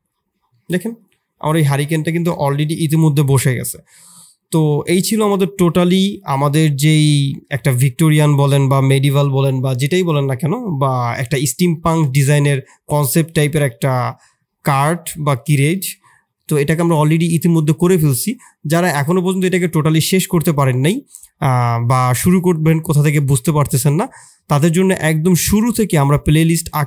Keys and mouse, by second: 0.5 middle click, 1.5 middle click, 2.0 shift+click, 4.5 middle drag, 4.9 shift+drag, 7.0 shift+click, 11.7 shift+drag, 12.4-12.8 middle drag, 13.0 middle drag, 13.5 middle click.